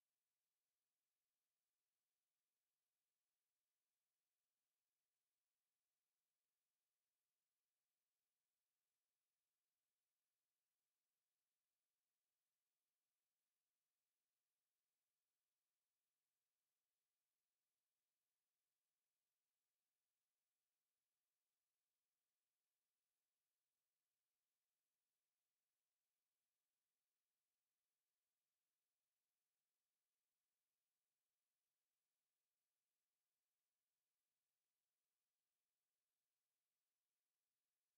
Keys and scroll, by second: 22.6 ctrl+z.